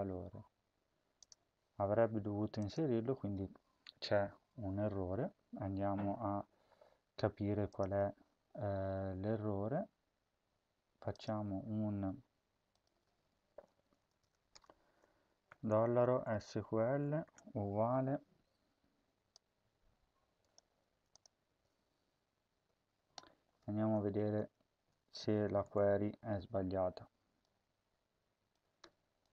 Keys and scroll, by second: 13.6 BackSpace, 13.6 BackSpace, 14.0 BackSpace, 14.4 Return, 15.1-17.0 typing, 20.6 ctrl+c, 21.2 ctrl+v, 24.0 Left, 24.2 Tab, 24.6 Right, 25.3-26.1 typing, 28.6 Tab.